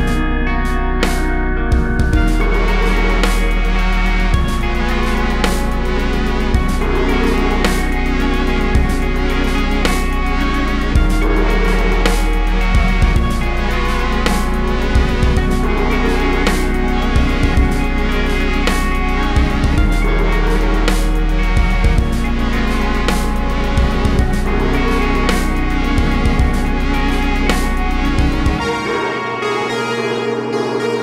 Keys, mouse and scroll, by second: 1.0 shift+click, 1.3 shift+click, 2.0 shift+scroll up 1, 2.8 shift+click, 4.4 click, 5.0 scroll down 1, 5.2 scroll up 1, 8.4-8.8 scroll down 1, 12.4-15.9 drag, 19.6 click, 23.0 click, 23.7 click, 24.2 KP_0, 25.4 a, 30.1 shift+d.